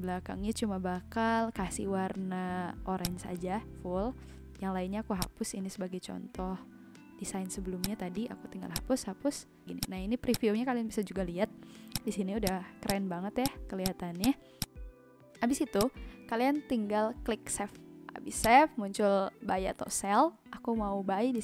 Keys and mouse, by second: 2.9 click, 5.2 click, 7.7 click, 11.8 click, 15.7 click, 18.3 click.